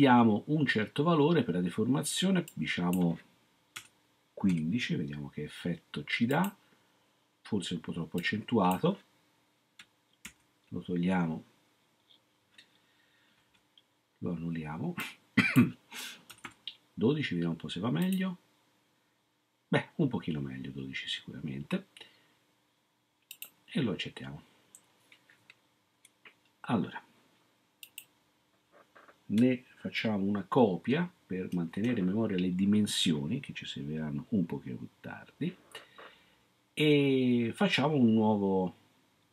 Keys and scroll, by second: 3.8-4.4 typing, 10.2 ctrl+z, 13.5 ctrl+z, 16.0-16.9 typing, 31.5 ctrl+c.